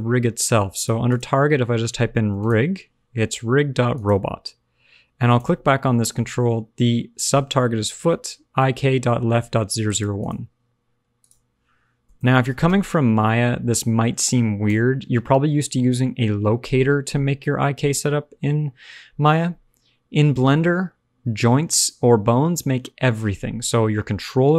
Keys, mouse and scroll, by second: 5.2 click, 10.1 click, 11.1 click, 12.2 o.